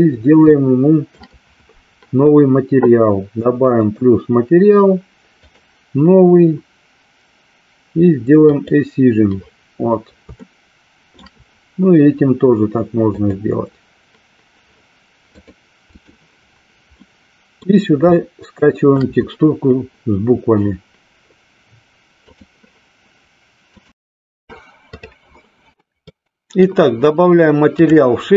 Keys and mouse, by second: 0.5-1.5 shift+middle drag, 3.7 click, 5.5 click, 8.5 click, 10.4 shift+middle click, 13.2 click, 15.4 click, 17.2 middle click, 18.3 shift+middle click, 26.4 middle click.